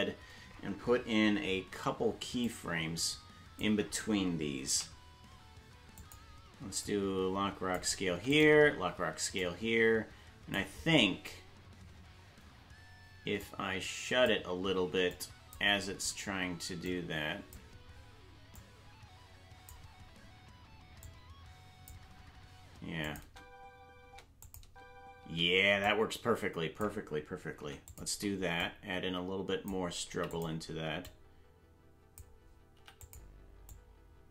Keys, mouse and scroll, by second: 2.5-3.6 drag, 4.7 i, 6.8 click, 8.1 i, 9.4-10.6 drag, 13.4 click, 15.1 click, 16.8 click, 18.6-19.7 drag, 21.0 click, 23.0 click, 23.2 space, 24.4 click, 24.4 space, 24.6 space, 25.8-26.8 drag, 25.8 space, 27.6 i, 28.6 click, 30.1 i, 31.1 click, 32.7 i, 33.7-34.3 drag.